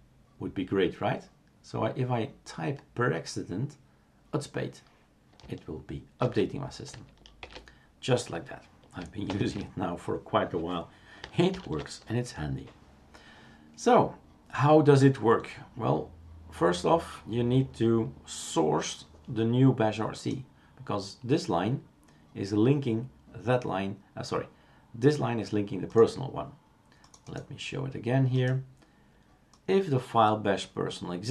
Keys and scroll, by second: 6.3 shift+super+q, 7.4 shift+super+q, 9.3 shift+super+Return, 11.5 ctrl+alt+t.